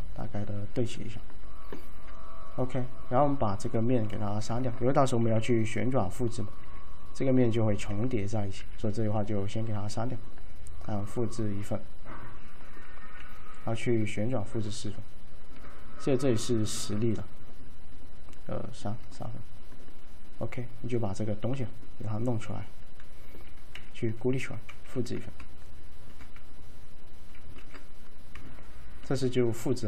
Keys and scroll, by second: 5.4 d, 8.0 d, 8.7 d, 11.9 typing, 13.3 e, 23.8 a, 24.9 w, 27.6 ctrl+z.